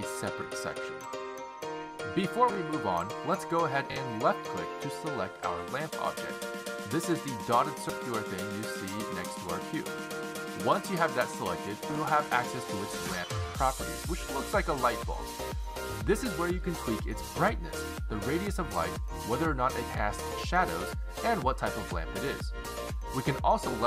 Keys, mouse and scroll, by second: 2.5 click, 6.1 click, 15.7 click, 17.7 click, 18.9 click, 20.4 click, 20.8 click, 21.4 click, 21.9 click, 22.3 click, 22.9 click.